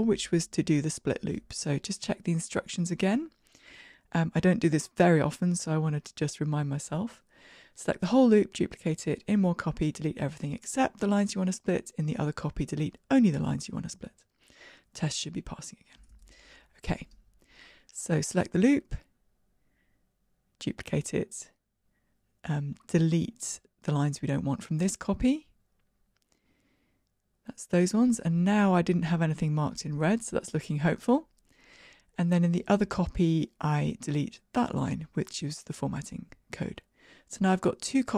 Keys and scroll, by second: 17.4 alt+Up, 20.2 super+d, 27.2 super+x.